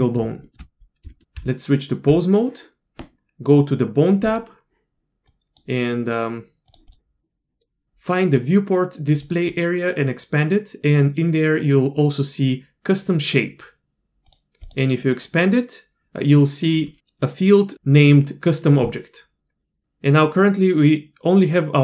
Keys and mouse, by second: 0.4 shift+click, 1.1 shift+click, 1.3 Tab, 4.3-5.6 drag, 6.7 drag, 6.9-9.4 drag, 14.3 click, 14.7 click, 18.9-21.8 drag.